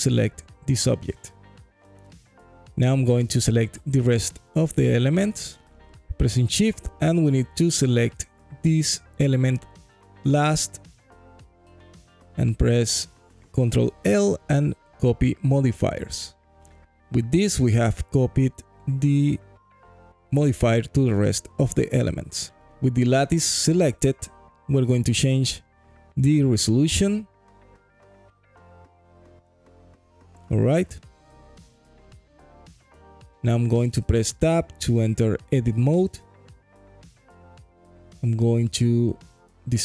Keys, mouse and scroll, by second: 4.5 click, 5.5 shift+click, 6.2 shift+click, 6.7 shift+click, 7.5 shift+click, 8.2 shift+click, 11.2 ctrl+l, 16.5 click, 20.9 click, 23.4 click, 24.5 click, 25.2 click, 26.9 click, 32.6-32.9 scroll down 2, 33.1 alt+click, 34.3 click, 35.7 Tab, 37.9 KP_3, 39.4 1.